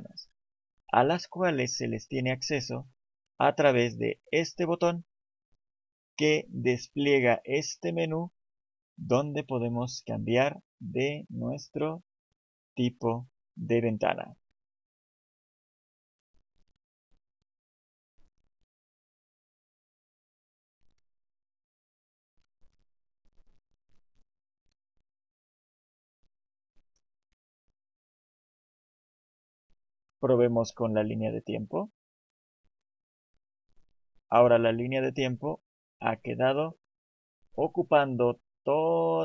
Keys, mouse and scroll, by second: 4.8 click, 30.2 click.